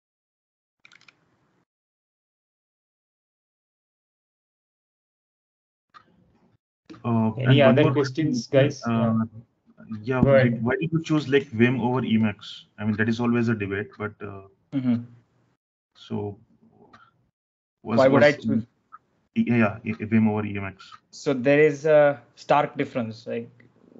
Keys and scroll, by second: 0.8 super+Tab, 2.9 super+Tab.